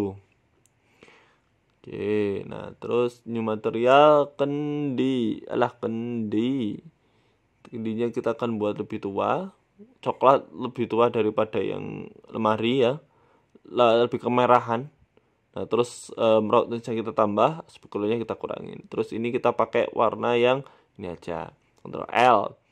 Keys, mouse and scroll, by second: 1.7 shift+middle click, 2.0 middle click, 2.5 right click, 3.1 click, 3.7 click, 5.7 click, 6.4 Left, 8.6 click, 13.5-13.9 scroll down 2, 14.6 click, 14.6-15.9 scroll down 3, 17.2 click, 18.4 middle click, 18.7 scroll up 3, 19.1 right click, 19.3 scroll down 3, 19.4 scroll up 1, 19.8 scroll down 3, 21.2 shift+right click, 21.9 ctrl+l.